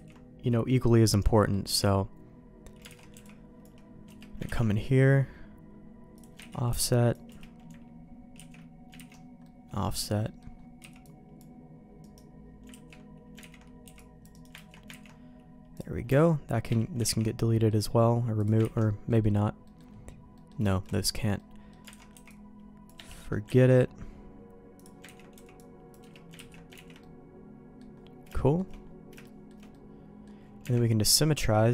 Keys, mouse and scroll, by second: 1.4 middle click, 1.7 Tab, 2.9 alt+a, 3.1 c, 4.4 ctrl+q, 6.5 ctrl+x, 6.7 c, 8.3 ctrl+q, 8.9 ctrl+x, 9.4 middle click, 10.2 middle click, 10.8 c, 12.7 ctrl+q, 13.4 ctrl+x, 13.8 c, 14.7 ctrl+q, 15.0 ctrl+x, 16.5 Tab, 17.2 ctrl+x, 17.5 middle click, 18.4 click, 18.6 ctrl+x, 19.1 middle click, 19.6 middle click, 20.3 middle click, 20.7 shift+middle click, 20.9 middle click, 21.3 middle click, 21.9 alt+a, 22.1 c, 23.1 middle click, 23.7 ctrl+q, 25.0 ctrl+x, 25.3 c, 26.3 ctrl+q, 26.7 ctrl+x, 27.0 middle click, 28.3 shift+middle click, 29.2 shift+middle click, 29.7 middle click, 30.6 Tab, 31.1 middle click.